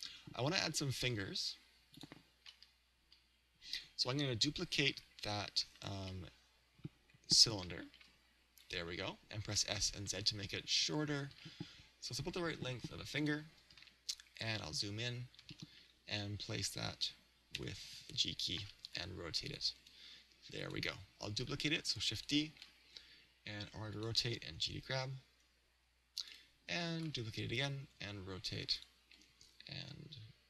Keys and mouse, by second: 6.4 click, 7.9 shift+d, 8.7 click, 10.1 s, 10.5 click, 13.3 click, 15.6-17.4 middle drag, 17.6 g, 18.5-23.9 drag, 19.0 r, 19.9 g, 21.5 shift+d, 22.5 r, 24.1 click, 24.5 g, 26.3-30.4 drag, 27.1 shift+d, 27.9 r, 29.2 g.